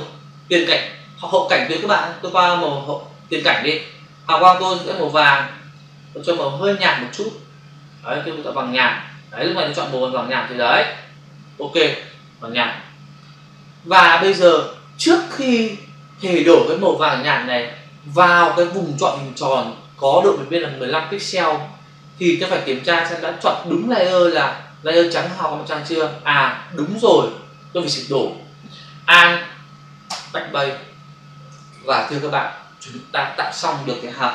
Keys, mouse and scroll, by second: 3.2 click, 5.1 click, 6.1 click, 9.1 click, 11.5 click, 30.1 alt+BackSpace, 31.5 ctrl+d.